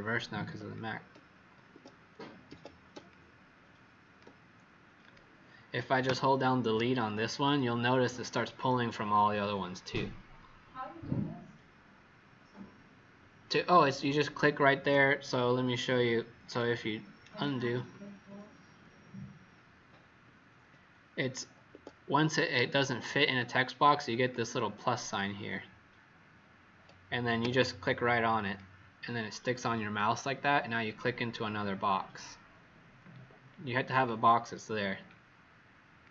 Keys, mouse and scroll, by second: 1.6 Escape, 3.0 click, 6.0-14.7 Delete, 16.4 click, 17.2 ctrl+z, 17.5 ctrl+z, 18.1 ctrl+z, 18.4 ctrl+z, 18.7 ctrl+z, 19.4 ctrl+z, 19.7 ctrl+z, 20.1 ctrl+z, 21.7 Escape, 22.9 z, 23.3 click, 27.3 v, 28.4 click, 33.4-34.6 alt+scroll down 5, 36.0 click.